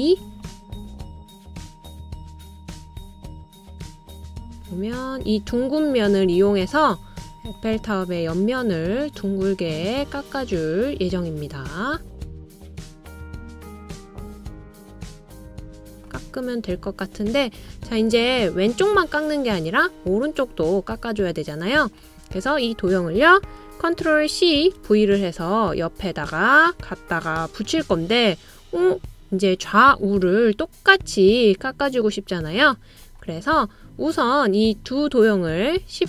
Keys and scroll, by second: 24.7 super+c, 25.1 super+v.